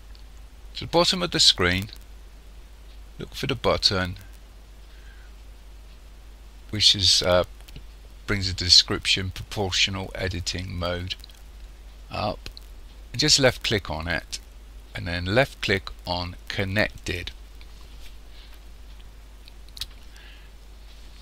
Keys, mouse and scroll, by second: 13.4 click.